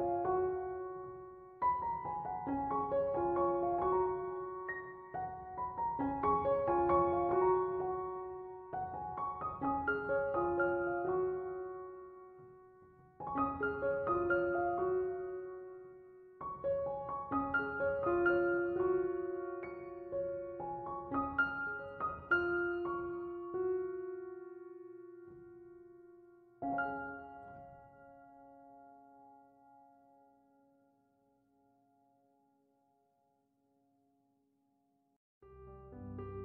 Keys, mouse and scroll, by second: 34.3 c, 34.4 o, 34.6 m.